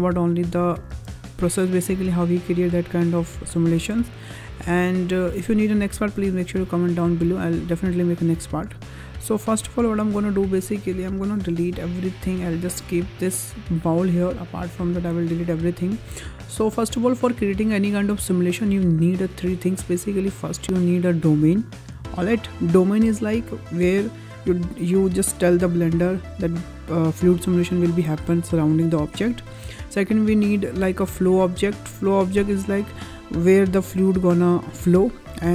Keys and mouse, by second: 0.2-0.5 middle drag, 0.8 space, 2.0-2.4 middle drag, 3.6 space, 4.3 click, 5.1-5.4 middle drag, 6.0 middle click, 7.9 shift+middle click, 9.8 click, 10.5 middle drag, 11.1 click, 12.2 Delete, 12.7 click, 13.7 middle click, 14.6 shift+middle drag, 20.2 click, 21.2 click, 31.0 click, 31.6 click, 32.3 click.